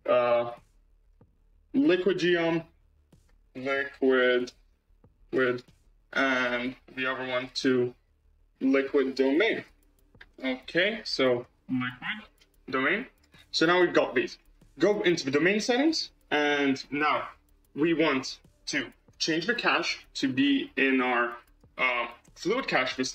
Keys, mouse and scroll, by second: 1.2 Left, 1.8 BackSpace, 2.1 BackSpace, 2.2 BackSpace, 7.3-9.8 drag, 14.2 click, 15.2 scroll down 2, 15.9-18.7 scroll down 12, 19.2-21.8 drag.